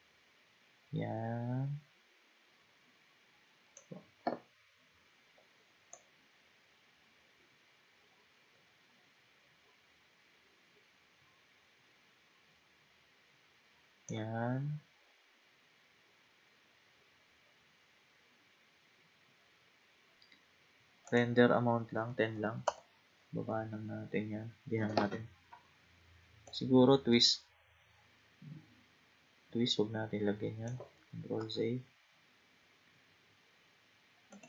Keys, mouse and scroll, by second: 5.9-9.0 drag, 15.6-16.2 scroll up 3, 21.1-23.9 drag, 23.9-25.5 scroll down 2, 26.5-29.5 drag, 31.4 ctrl+z, 32.1-33.7 scroll down 2, 33.7-34.3 scroll down 1, 34.3 click.